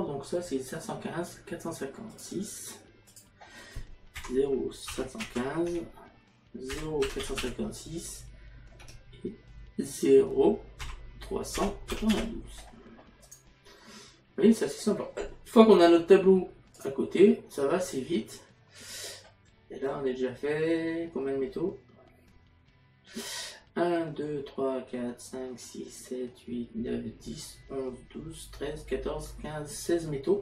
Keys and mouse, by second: 6.8 KP_Decimal, 10.9 KP_Decimal, 13.3 click.